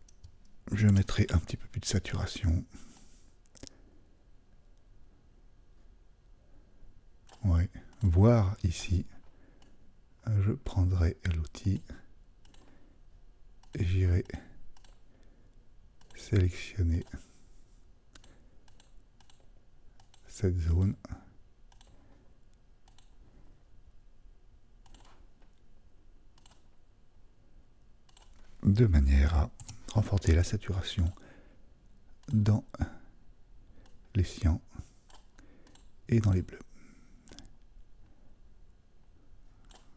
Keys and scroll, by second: 0.9 super+u, 29.6 super+u.